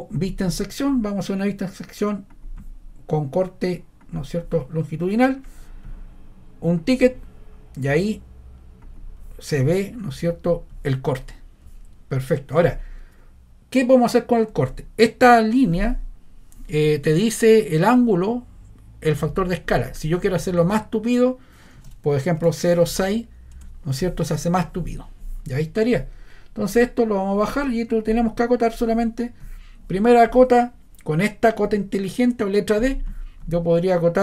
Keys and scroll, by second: 14.6 Escape, 21.8 0, 22.4 ., 22.9 6, 23.5 Return.